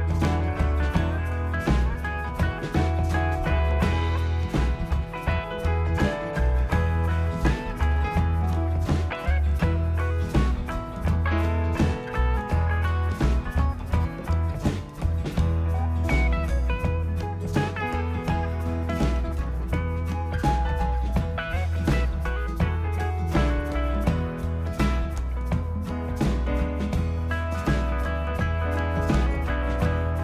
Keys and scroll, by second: 0.3 5, 0.6 2, 3.2-4.2 typing.